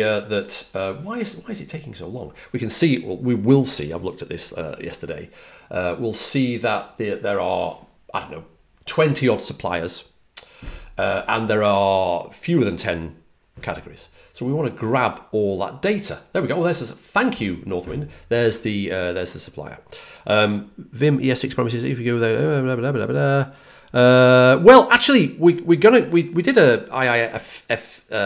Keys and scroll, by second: 15.6 typing.